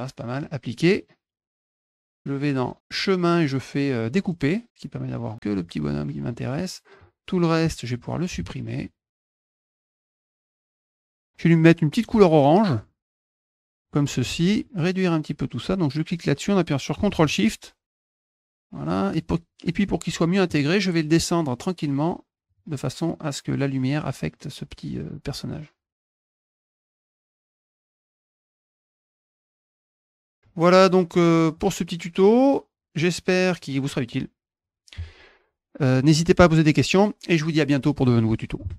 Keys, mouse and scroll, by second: 0.6 click, 1.5 click, 4.0 click, 4.6 click, 4.7-6.1 drag, 6.8 click, 9.0 middle click, 9.5 middle click, 9.7 middle click, 9.9 middle click, 10.3 middle click, 10.5 middle click, 11.0 click, 13.5 click, 15.4-18.2 drag, 18.4 click, 21.4 click, 22.3 click, 25.9 click, 26.0 ctrl+z, 26.5 alt+click, 26.7 alt+click, 29.0 ctrl+shift+click, 29.7 middle click, 29.9-31.8 drag, 32.5 click, 33.7 click.